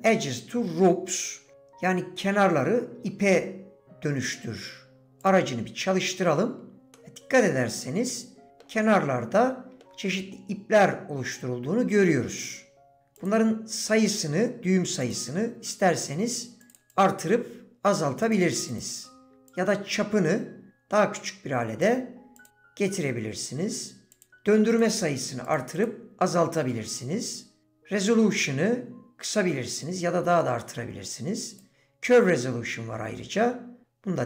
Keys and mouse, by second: 6.9 middle click, 8.5 middle click, 9.8 shift+click, 13.2 click, 16.7 click, 16.9 click, 18.6 click, 19.5-21.8 shift+drag, 24.7 click, 24.9 click, 28.0-31.7 drag, 32.4-34.2 drag.